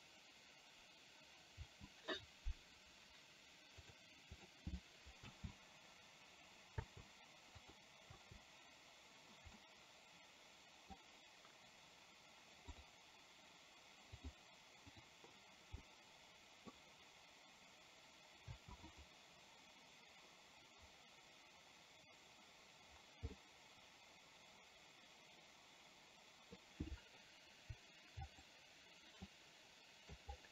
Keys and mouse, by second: 1.7 space, 4.4 click, 5.6 space, 6.9 space, 8.3 space, 9.8-11.2 middle drag, 14.4 click, 15.2 click, 15.9-16.9 middle drag, 18.7 space, 18.9 click, 23.4-26.6 middle drag, 28.2 click, 29.4 middle click.